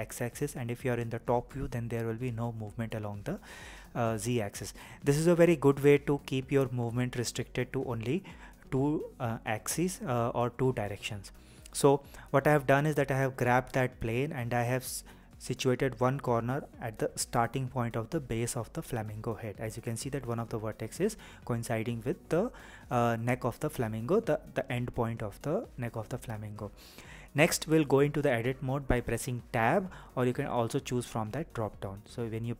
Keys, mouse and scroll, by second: 4.5-5.2 scroll up 4, 5.2-6.3 scroll down 3, 9.5 click, 11.4-12.4 scroll up 5, 12.4-15.4 scroll down 1, 26.6 Tab, 31.9 Tab.